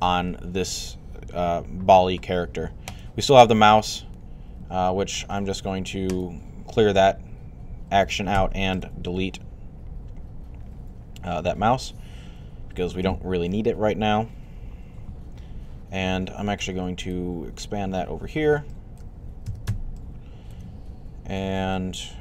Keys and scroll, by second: 8.1 x.